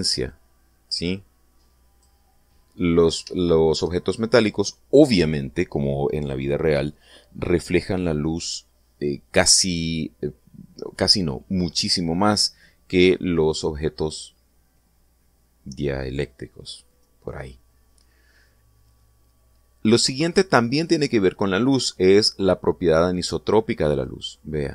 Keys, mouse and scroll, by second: 1.3-3.2 drag.